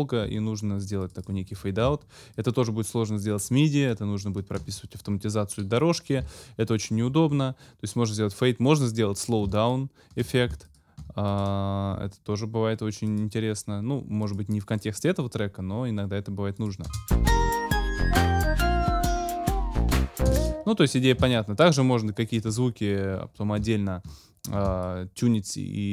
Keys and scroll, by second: 16.8 space, 20.3 space, 21.2 ctrl+shift+space.